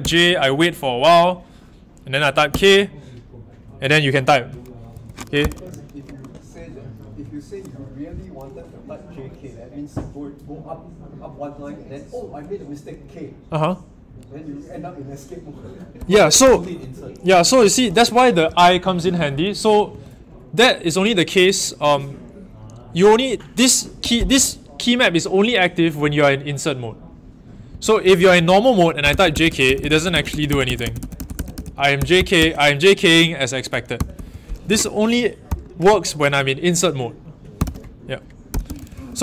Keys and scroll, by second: 0.0 i, 2.5 k, 4.9 Escape, 5.3 typing, 15.7-16.9 typing, 18.1-19.8 typing, 24.0-24.3 typing, 27.7-32.3 typing, 33.7-35.4 typing, 37.5-39.2 typing.